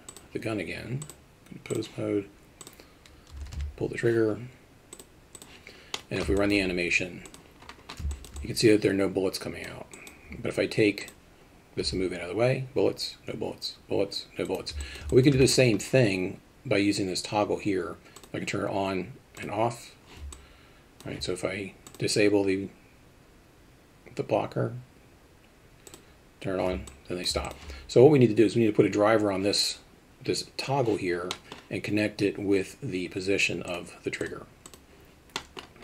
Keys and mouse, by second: 1.1 click, 2.6-4.0 drag, 5.1 click, 5.9 middle click, 6.4 alt+shift+middle drag, 8.1 alt+shift+middle drag, 8.3-9.7 alt+middle drag, 9.9 alt+middle click, 11.0 click, 14.8 alt+middle click, 15.1 alt+shift+middle click, 18.1 click, 19.3 click, 20.3-21.0 alt+middle drag, 21.8 click, 25.9 click, 26.9 alt+middle click, 27.4 alt+shift+middle click, 31.3 middle drag, 33.7 click, 34.2 click, 35.4 middle drag.